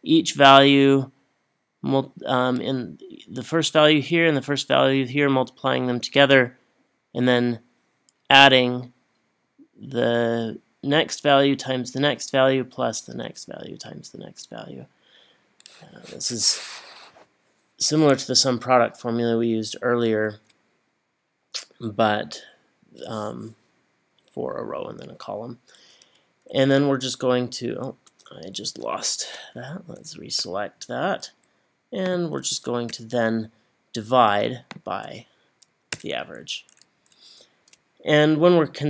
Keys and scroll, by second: 26.6 Right, 28.0 Left, 29.5 shift+Down, 32.9 /, 36.0 Return, 37.0 Up.